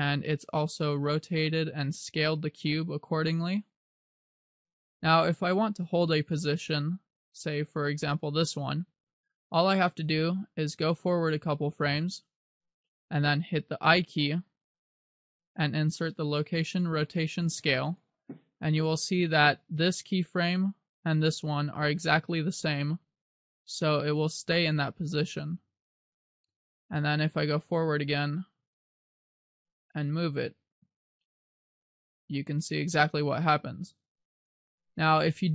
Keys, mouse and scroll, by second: 11.5 click, 15.1 i, 20.1 click, 21.3 click, 22.8 click, 28.7 g, 30.2 click, 31.5 click.